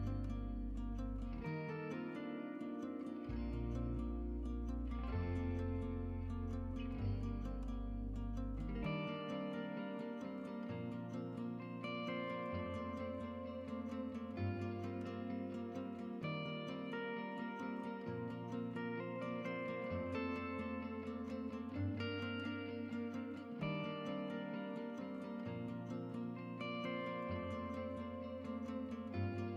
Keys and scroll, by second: 6.2-6.9 typing, 17.4 typing, 19.6 Tab, 27.0 Tab.